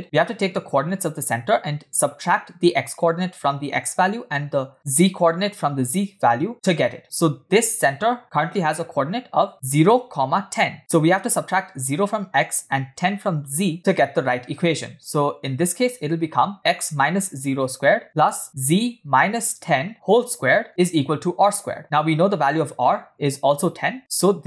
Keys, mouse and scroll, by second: 8.2 click, 8.5 click, 9.7 click, 10.4 click, 11.3 click, 15.5 click, 15.9 click, 16.2 click, 17.6 click, 18.2 click, 19.3 click, 19.9 click, 20.7 click, 20.9 click, 21.6 click.